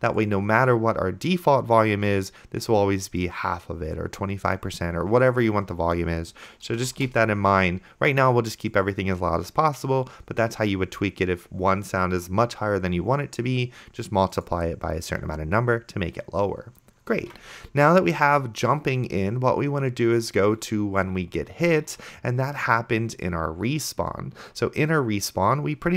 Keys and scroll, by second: 7.1 BackSpace, 17.5 ctrl+s.